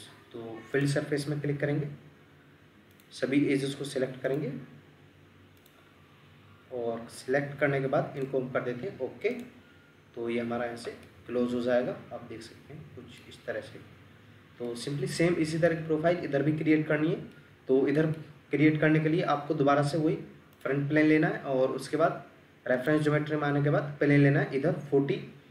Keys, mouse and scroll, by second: 0.3 Escape, 1.7-4.0 scroll down 1, 10.1 scroll up 1, 11.1 middle click, 13.4-14.6 scroll up 1, 14.6 middle click.